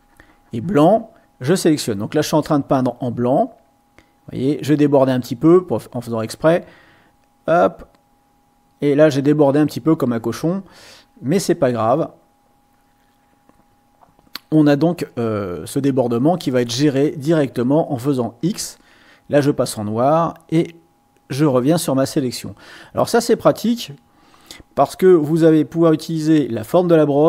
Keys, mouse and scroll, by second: 0.0-1.1 drag, 1.3 click, 1.9 click, 2.5-9.4 drag, 9.8-16.0 drag, 16.9 click, 18.4 x, 20.1-24.3 drag, 25.1 click.